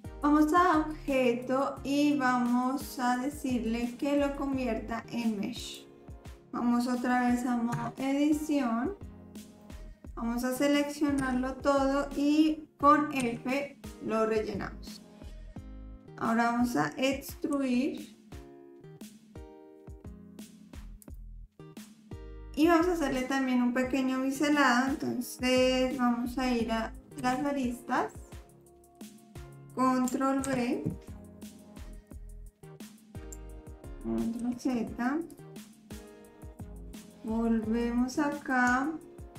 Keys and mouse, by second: 1.2-5.7 drag, 7.7 Tab, 9.6 middle click, 11.2 a, 13.2 f, 15.1-16.4 middle drag, 17.5 e, 27.2 2, 28.6 middle click, 30.5 ctrl+b, 33.6 ctrl+z, 34.4 ctrl+z, 36.5 click, 38.8 shift+click.